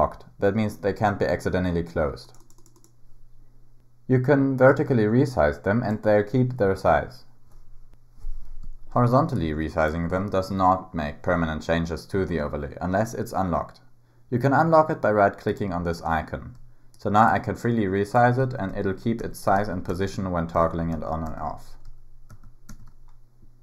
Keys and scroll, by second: 18.4 super+w, 18.7 super+w, 19.2 super+w, 19.6 super+w, 19.9 super+w, 20.5 super+w, 20.9 super+w, 21.3 super+w, 22.3 super+w, 22.7 super+w.